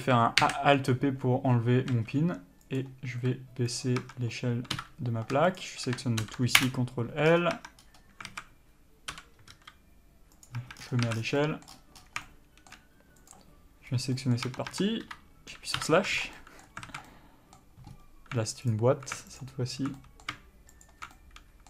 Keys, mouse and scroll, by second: 0.0 a, 0.7 alt+p, 2.2 s, 4.3 Tab, 5.0 KP_Divide, 5.8 shift+click, 6.9 ctrl+l, 7.5 scroll down 1, 7.8 Tab, 8.1 scroll up 1, 8.6 alt+a, 9.4 l, 9.8 s, 10.7 click, 10.9 Tab, 11.0-11.6 scroll down 2, 11.3 alt+a, 11.6 middle click, 12.0 scroll up 1, 12.5 shift+middle click, 13.6 click, 14.2 scroll up 1, 14.4 middle click, 14.7 Tab, 16.0 KP_Divide, 16.3 Tab, 16.6 middle click, 17.1 alt+a, 17.3 middle click, 18.2-19.0 scroll up 1, 19.0 alt+click, 20.2 middle click, 21.1 alt+shift+click, 21.4 middle click.